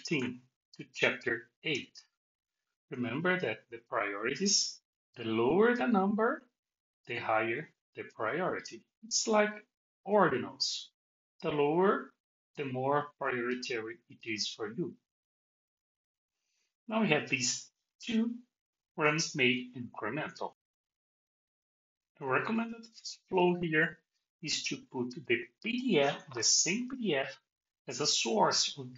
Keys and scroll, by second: 0.1 alt+shift+x.